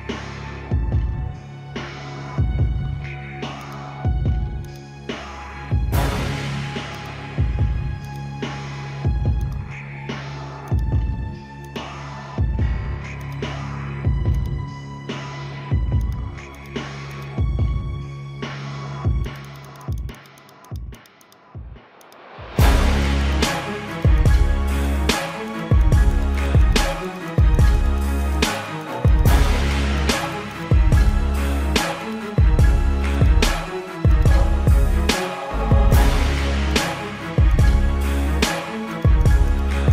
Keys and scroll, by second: 0.7 space, 1.8 space, 2.8 space, 3.9 space, 4.9 space, 6.7 space, 8.6 ctrl+alt+z, 8.7 ctrl+=, 9.2 ctrl+-, 9.4 space, 9.6 space, 9.8 ctrl+-, 9.9 space, 10.3 ], 12.6 space, 13.8 space, 14.3 space, 16.7 space, 18.0 space, 19.4 space, 20.6 space, 21.2 space, 23.2 space, 25.5 space, 26.6 space, 26.9 ctrl+-, 27.6 ctrl+-, 28.2 space, 28.3 ctrl+alt+z, 29.1 space, 30.7 ctrl+alt+z, 31.6 space, 32.5 ctrl+=, 32.8 ctrl+=, 33.0 space, 33.8 space, 35.3 space, 36.1 space, 37.8 space, 38.0 space, 38.7 space.